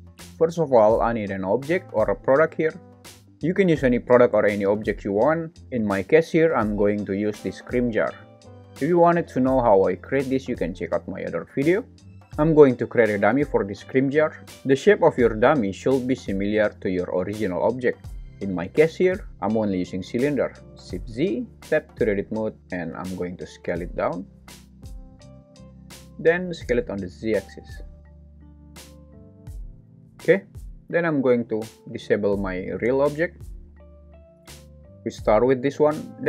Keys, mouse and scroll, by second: 12.5 shift+a, 21.1 shift+z, 21.6 Tab, 23.4 s, 26.2 s, 26.5 z, 28.5 click, 28.5 g, 28.9 Tab, 29.9 shift+z, 31.6 shift+click.